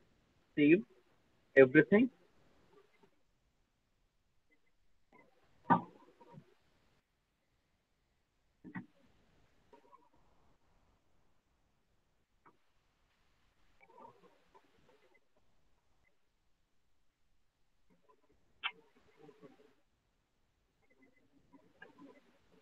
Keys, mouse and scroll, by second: 1.2 click.